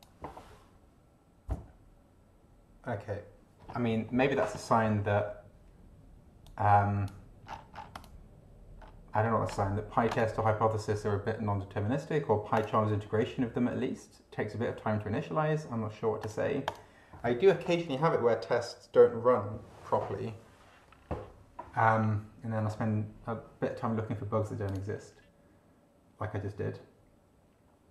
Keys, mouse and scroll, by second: 6.4 click, 7.5-8.0 scroll down 1, 8.0 click, 8.8-9.5 scroll up 2, 12.6 click, 13.1 scroll up 1, 16.2 click, 16.6 click, 24.6 click.